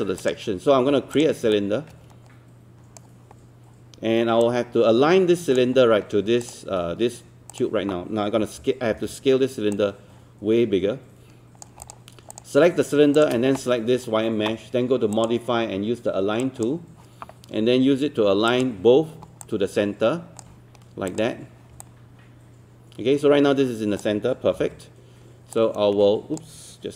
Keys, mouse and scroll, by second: 0.2 click, 1.2 click, 1.6-3.2 shift+right drag, 4.4 click, 8.4 e, 13.2 shift+click, 15.2-16.2 drag, 19.4 alt+click, 21.1 click, 21.8-24.0 alt+drag, 24.6 alt+w, 25.6 click.